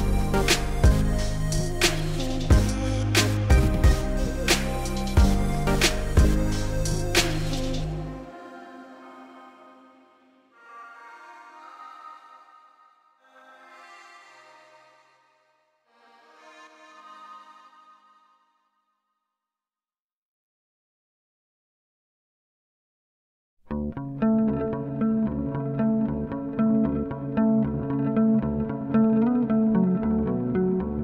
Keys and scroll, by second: 20.2-21.3 typing, 26.1 s, 28.3 s.